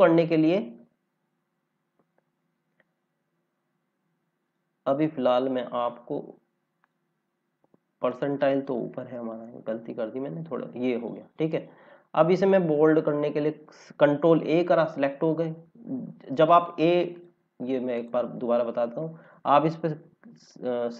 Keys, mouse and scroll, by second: 0.8 scroll down 1, 2.6 scroll up 1, 4.4 click, 6.7 click, 12.7 ctrl+a, 15.0 scroll up 1, 16.5 click.